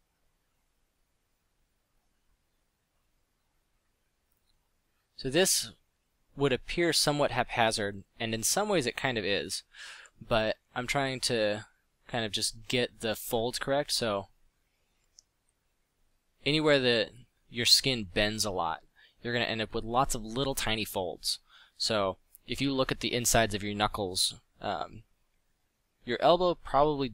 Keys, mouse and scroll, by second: 1.2 f, 2.2 f, 4.9 f, 10.2 ctrl+z, 10.6 f, 13.1 ctrl+z, 14.4 f, 14.9 f, 20.4 ctrl+z, 22.5 ctrl+z, 23.9 middle click, 25.1 f.